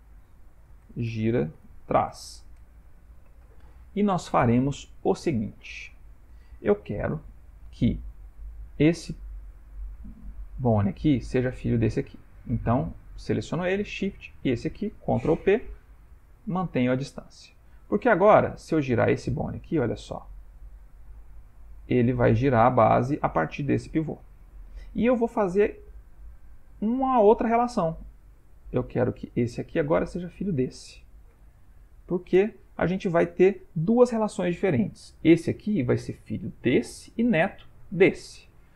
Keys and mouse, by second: 5.5 ctrl+middle click, 11.1 click, 13.0 click, 14.4 shift+click, 15.5 ctrl+p, 17.4 Tab, 18.9 click, 19.6 r, 28.7 Tab, 29.6 click, 30.5 shift+click, 31.4 ctrl+p, 35.2 click, 36.7 click, 37.9 click.